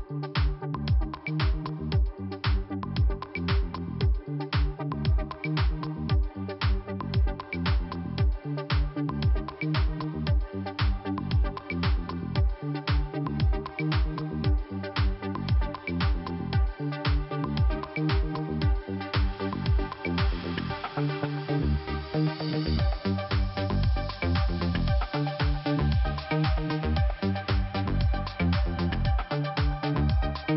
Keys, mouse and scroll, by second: 0.2 click, 1.9-2.2 scroll down 2, 2.8-3.8 scroll up 1, 4.2 click, 4.3 click, 6.2 click, 7.5 click, 7.6 click, 8.5 click, 8.6 click, 9.7 click, 9.8 click, 11.3 click, 11.4 click, 11.6 click, 11.7 click, 12.7 click, 12.8 click, 13.8 click, 13.8 click, 14.3 click, 14.4 click, 16.0 click, 17.8 click, 17.9 click, 19.3 click, 19.4 click, 21.1 scroll down 1, 21.8 click, 23.3 click, 25.3 click, 27.2 right click, 27.9 click, 28.1 click, 29.8 click.